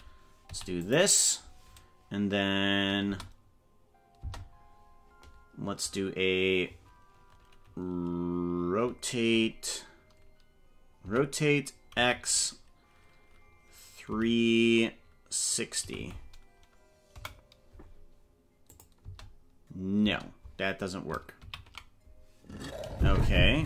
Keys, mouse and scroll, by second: 0.4 i, 3.0 space, 4.2 space, 11.0 r, 18.7 click, 19.0 space, 20.1 space, 21.6 ctrl+z.